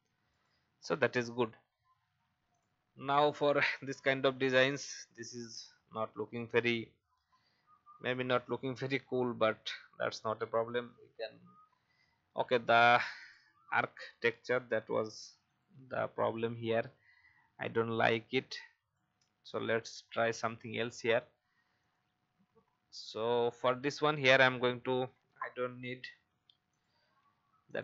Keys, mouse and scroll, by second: 0.3 click, 1.9 alt+scroll down 1, 2.5 click, 3.1-6.5 scroll up 1, 8.2 alt+scroll down 1, 13.1-14.3 drag, 14.7 ctrl+c, 15.4 click, 15.7 ctrl+v, 18.0 shift+click, 19.5 click, 26.2 i, 26.7 click, 27.1 v, 27.7 click.